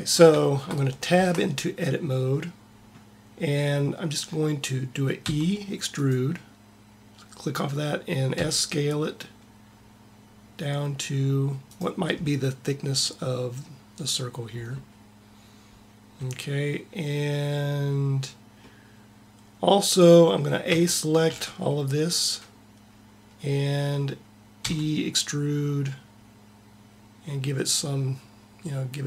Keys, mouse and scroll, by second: 0.3 middle click, 0.9 Tab, 5.1 e, 8.2 s, 18.7-19.7 middle drag, 20.6 a, 21.2 a, 24.4 e.